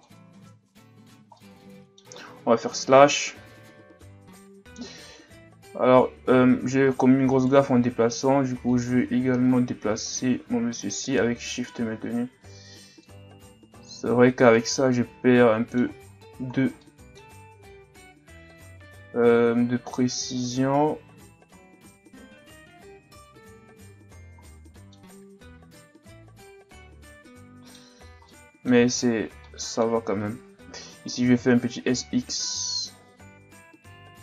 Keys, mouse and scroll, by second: 0.3 Tab, 0.7 a, 1.1 scroll down 2, 1.4-2.7 middle drag, 2.7 KP_Divide, 4.3-5.2 middle drag, 5.2 ctrl+z, 6.5 Tab, 6.8 Tab, 7.3 right click, 7.7 Tab, 8.7 click, 13.6 Tab, 14.0 a, 14.2 scroll down 1, 14.5-16.0 middle drag, 16.0-16.8 scroll down 9, 16.8-17.4 middle drag, 17.4 Tab, 18.5 click, 23.6 Tab, 24.2 scroll down 2, 24.4-25.1 middle drag, 25.1-25.5 scroll up 7, 25.8-28.0 middle drag, 28.0 scroll down 3, 28.3-28.8 middle drag, 28.8 Tab, 29.4-30.9 middle drag, 30.9 s.